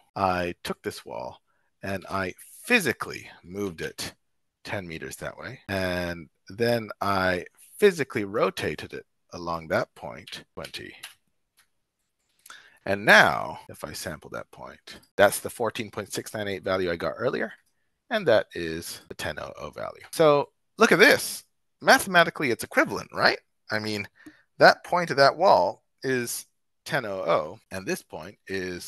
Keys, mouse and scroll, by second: 0.2 shift+middle click, 0.4 shift+click, 1.9 g, 2.0 x, 3.4 KP_1, 3.6 KP_0, 5.5 shift+Return, 5.5 shift+middle click, 5.9-7.6 shift+drag, 7.6 shift+middle click, 8.4 click, 10.1 KP_7, 10.4 r, 10.4 KP_2, 10.4 KP_0, 10.9 Return, 12.0 shift+click, 12.3-13.0 drag, 17.4 click, 18.9 click, 20.3 shift+click, 21.4 shift+click.